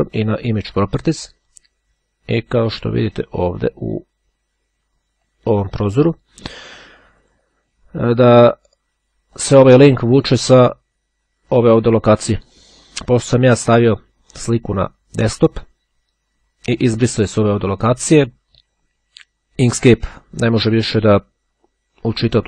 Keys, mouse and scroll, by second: 0.6 click, 4.9-7.9 drag, 9.1 click, 10.3-13.4 drag.